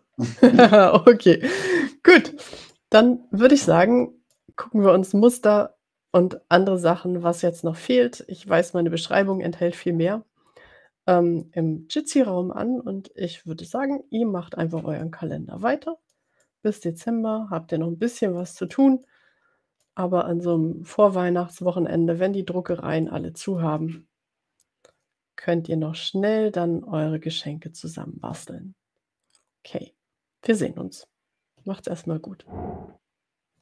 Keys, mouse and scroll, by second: 0.2-1.6 scroll down 4, 2.8-4.0 middle drag, 4.0 click, 15.1-18.3 middle drag, 18.4 middle click, 19.0-20.2 drag, 23.4 middle click.